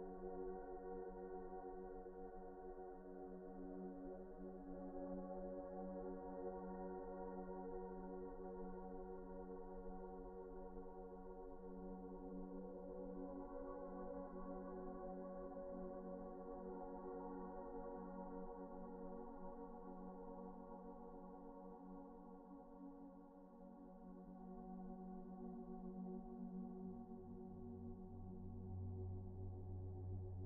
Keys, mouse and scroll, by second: 2.0 middle click, 2.4 Tab, 3.1 Tab, 3.8 middle click, 4.7 alt+shift+click, 5.4 s, 8.1 scroll down 1, 8.5 middle click, 8.8-9.2 scroll down 1, 9.2 middle click, 9.8 Tab, 10.3 shift+middle click, 11.2 alt+shift+click, 12.0 alt+a, 12.3 middle click, 13.2 alt+shift+click, 13.5 middle click, 14.4 scroll up 1, 15.4 alt+shift+click, 15.7 alt+shift+z, 16.0-16.3 scroll down 1, 16.3 middle click, 16.6 a, 19.8-20.3 scroll up 1, 21.4 alt+shift+click, 21.9 scroll down 1, 22.1 middle click, 22.8-23.2 scroll up 1, 23.2 scroll down 1, 23.8 alt+shift+click, 24.2 alt+shift+middle click, 25.6 alt+shift+click, 26.0 alt+shift+scroll down 1, 26.3 middle click, 27.0 right click, 28.1 a, 29.5 scroll up 1, 29.9 a, 30.0 shift+middle click.